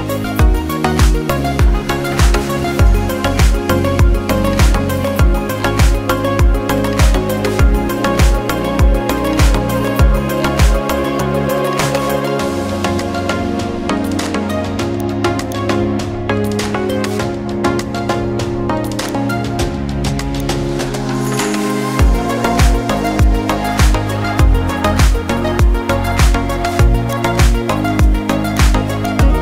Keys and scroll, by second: 1.1 ctrl+alt+shift+e, 5.8 ctrl+m, 9.5 ctrl+m, 13.3 ctrl+l, 16.7 ctrl+l.